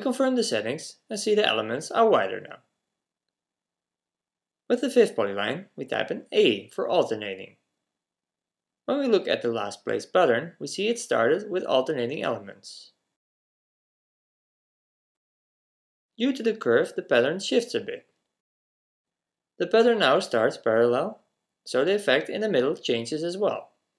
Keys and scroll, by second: 0.5-1.3 typing, 7.2 a.